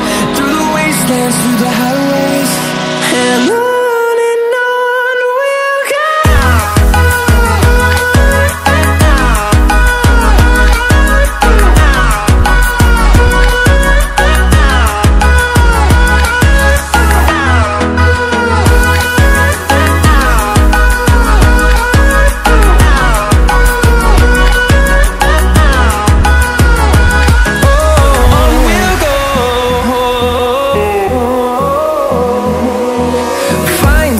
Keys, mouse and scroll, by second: 0.7 ctrl+alt+scroll down 2, 1.5 click, 2.1-2.4 ctrl+alt+scroll down 1, 2.4 ctrl+alt+scroll up 1, 3.8-4.2 ctrl+alt+scroll down 1, 4.2-4.6 ctrl+alt+scroll up 1, 6.7 click, 12.8 shift+click, 13.6 ctrl+scroll up 1, 14.2 ctrl+alt+scroll up 1, 16.3 Escape, 17.4 click, 27.8 ctrl+alt+scroll up 1, 30.4 click.